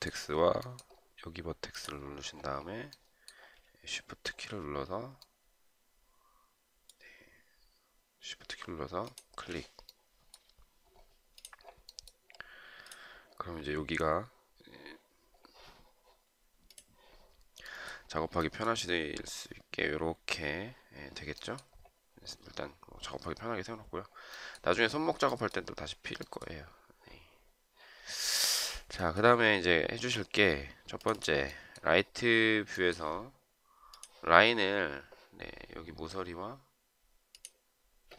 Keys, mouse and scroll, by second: 4.2 shift+scroll down 1, 5.0 shift+right click, 9.1 shift+click.